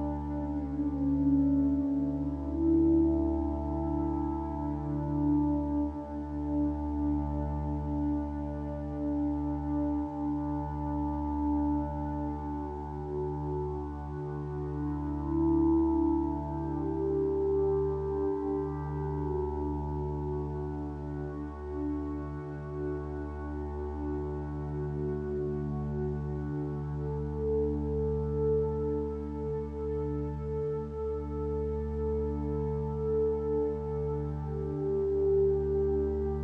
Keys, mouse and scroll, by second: 0.8 ctrl+space, 2.8 ctrl+space, 4.2 space, 13.8 m, 14.8 ctrl+d, 31.9 ctrl+t.